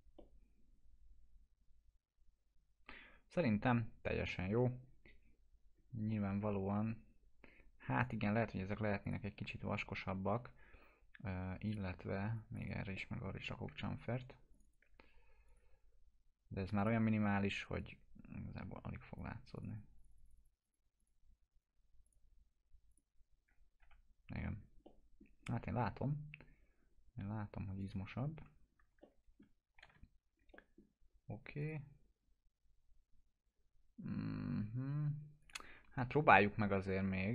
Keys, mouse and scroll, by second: 0.2-4.6 alt+middle drag, 4.9 scroll up 1, 8.1 click, 10.4 F4, 11.7 click, 13.0 middle click, 14.5 click, 15.5 click, 17.6 right click, 18.1-19.4 drag, 23.8 F4, 24.5 scroll down 1, 24.9-25.5 middle click, 25.5-26.1 alt+middle drag, 27.8 click, 28.4 F4, 29.0-29.7 alt+middle click, 29.8 t, 30.5 middle click, 31.6 click, 35.4 click, 35.9 ctrl+z.